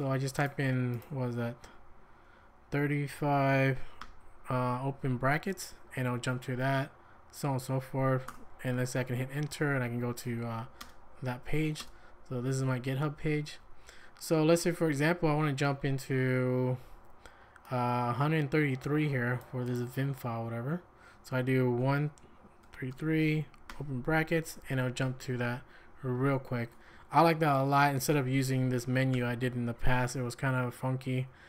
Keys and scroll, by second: 3.0-4.5 typing, 8.3 Return, 10.9 space, 11.8 space, 21.8-23.7 typing, 28.9 Escape, 29.1 m.